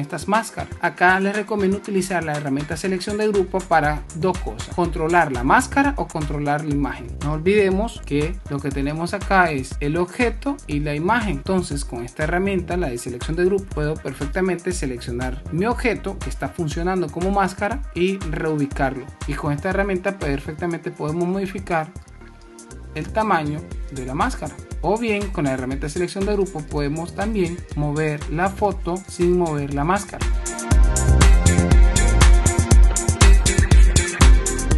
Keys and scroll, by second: 7.2 super+-, 8.1 super+y, 8.3 super+space, 13.7 super+y, 24.7 super+z.